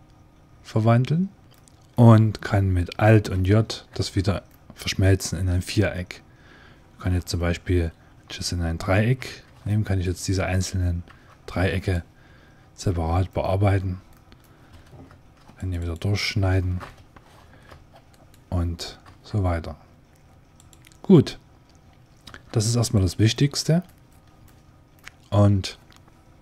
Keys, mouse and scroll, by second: 1.4-3.2 middle drag, 3.8 alt+j, 4.4-6.1 middle drag, 6.2 click, 9.1 ctrl+t, 9.5-11.6 drag, 10.9 e, 14.0 click, 15.0 ctrl+r, 15.4 click, 16.8 ctrl+Tab, 18.0 right click, 18.9 s, 22.1 e, 23.2-24.3 drag, 24.3-26.2 middle drag.